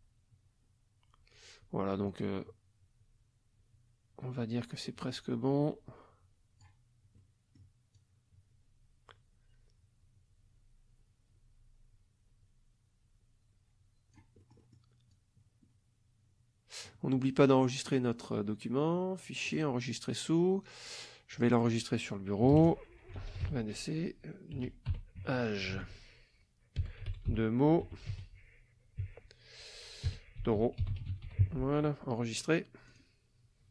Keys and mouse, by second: 7.2 middle click, 7.9-14.4 drag, 14.4 middle click, 15.1-17.1 drag, 17.9 click, 19.5 click, 21.3 click, 22.5 KP_2, 22.6 KP_0, 23.1 d, 24.3-29.0 typing, 30.2-31.8 typing, 32.9 click.